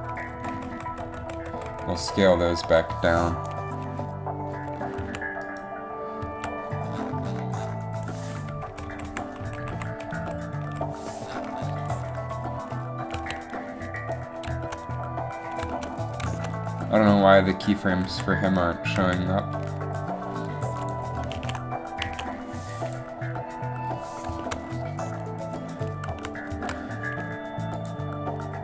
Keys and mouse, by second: 0.3 Right, 0.5 Right, 2.2 Right, 2.3 Right, 2.8 Left, 5.1 z, 6.3 z, 8.7 Left, 8.8 Left, 9.0 Left, 9.2 Left, 10.2 Right, 10.4 Right, 10.8 Right, 13.3 a, 14.1 a, 17.8 right click, 18.1 z, 19.1 z, 21.5 alt+a, 22.2 alt+a, 26.2 z, 26.6 z, 27.0 z.